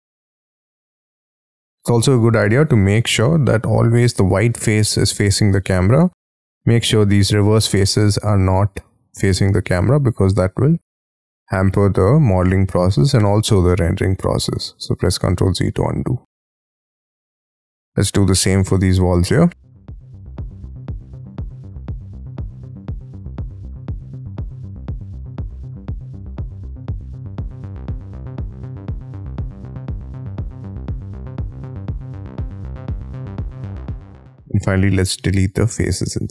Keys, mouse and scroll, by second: 1.8 middle click, 2.3 middle click, 2.8 middle click, 3.2 space, 3.5 scroll up 6, 5.8 right click, 7.8 middle click, 12.9 middle click, 15.2 ctrl+z, 16.4-17.5 scroll down 17, 16.7 Escape, 17.0 Escape, 17.3 Escape, 17.5 Escape, 17.8 middle click, 18.3 middle click, 19.1-19.8 scroll up 28, 19.9 double click, 20.1-20.6 scroll down 17, 20.3 e, 20.8 scroll up 10, 20.9-21.2 scroll down 2, 21.1 shift+middle click, 21.3 scroll up 7, 21.5 scroll down 6, 21.6-21.9 scroll up 12, 22.1-23.8 typing, 22.2 double click, 22.5 double click, 23.7 scroll down 6, 23.8 Escape, 24.1-24.6 scroll up 9, 24.2 middle click, 24.3 shift+middle click, 24.8 scroll down 6, 24.9 scroll up 2, 25.0-25.4 scroll down 14, 25.4 F2, 25.5 middle click, 25.7 scroll up 10, 26.0 double click, 26.1 scroll down 7, 26.8 double click, 27.4 scroll up 18, 27.6 space, 27.8 scroll down 15, 28.4 scroll up 4, 29.1 scroll down 3, 29.4 scroll up 1, 29.8 scroll down 1, 30.0-30.3 scroll up 2, 30.3-31.0 scroll down 18, 31.9 scroll down 9, 32.1 scroll up 8, 32.7 scroll down 15, 33.1 scroll up 13, 33.6-33.9 scroll down 29, 34.4-34.8 scroll up 1, 34.8 Delete, 35.6 Delete, 35.9 Delete.